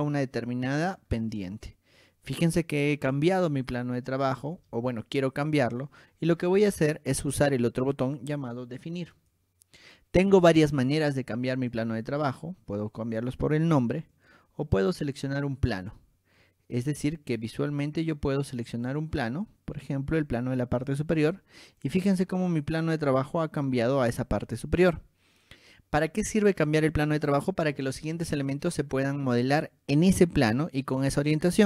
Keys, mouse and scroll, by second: 0.2 click, 1.0 click, 1.3-3.7 shift+middle drag, 6.8 click, 9.3 click, 11.9-12.4 drag, 13.0 click, 14.3 click, 15.9 click, 19.0 click, 21.0 click, 22.0 click, 22.4-24.5 shift+middle drag.